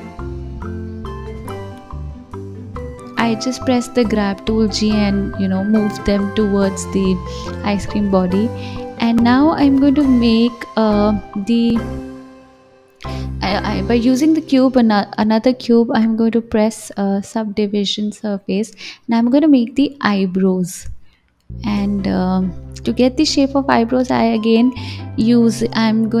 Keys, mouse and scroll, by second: 0.3-1.5 scroll up 4, 1.5 click, 2.5 g, 5.1 KP_1, 6.0 s, 7.5-10.5 drag, 11.3-11.9 drag, 12.2 shift+a, 13.5 s, 15.1-20.5 drag, 20.9-26.2 drag.